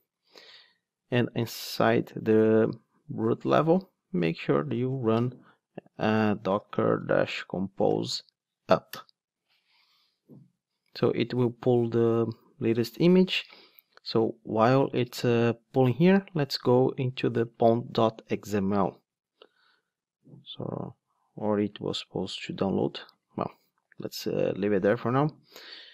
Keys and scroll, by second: 23.8 Right, 24.0 Down, 24.5 Right.